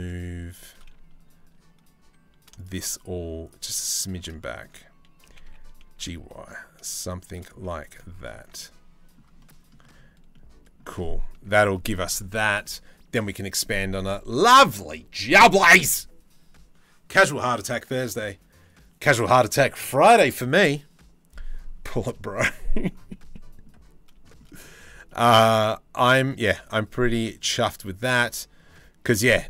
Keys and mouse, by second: 3.6 shift+click, 3.9 click, 4.9 g, 7.0 g, 7.1 z, 8.1 Tab, 8.2 middle click, 9.0 middle click, 9.9 middle click, 11.0 Tab, 13.9 middle click, 22.1 middle click, 23.0 middle click, 23.9 shift+middle click, 24.1 middle click, 24.7 shift+middle click, 25.1-28.8 middle drag.